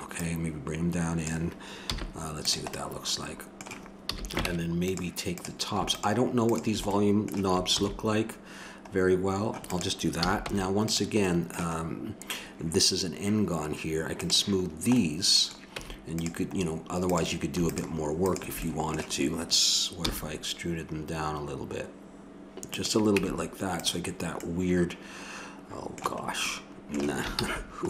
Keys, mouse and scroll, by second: 0.1-2.0 drag, 1.9 z, 4.1 a, 4.4 ctrl+Tab, 5.4-8.5 drag, 7.8 ctrl+b, 10.2 a, 10.6 Tab, 14.2-16.3 drag, 15.8 Tab, 17.1-18.9 drag, 20.0 e, 20.2-22.7 middle drag, 23.2 Tab, 27.3 ctrl+z.